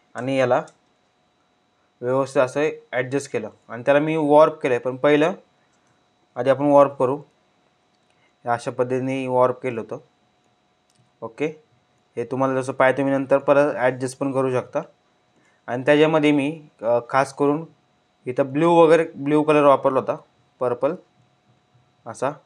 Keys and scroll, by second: 5.9 ctrl+t.